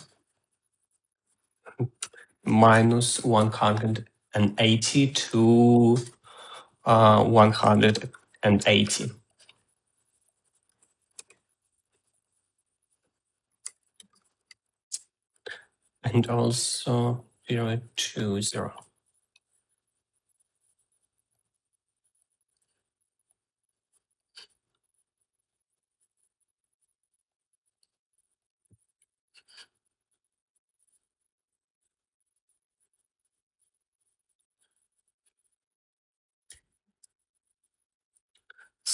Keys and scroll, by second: 2.5-3.9 typing, 8.6 8, 8.9 0, 9.3 Return, 11.5 Tab, 11.6-12.6 typing, 14.0-16.0 typing, 37.4-38.3 typing.